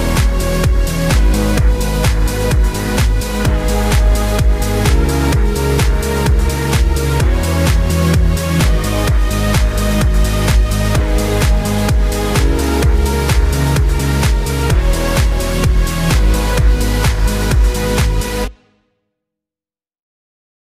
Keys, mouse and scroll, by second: 0.0 click, 0.3 scroll down 1, 0.6-0.9 scroll up 1, 1.7 click, 2.3 KP_5, 2.8 click, 3.5 KP_0, 4.1-7.0 drag, 7.0 KP_2, 7.1 KP_Decimal, 7.3 Return, 7.9-9.7 drag, 9.7-10.0 scroll down 3, 10.0 scroll up 4, 10.2-10.5 scroll down 1, 10.5 click, 11.5-15.9 drag, 15.9-16.3 scroll down 2, 16.5-19.0 drag, 19.0 scroll down 3, 19.2 click, 19.7-20.5 scroll up 7, 20.5 click.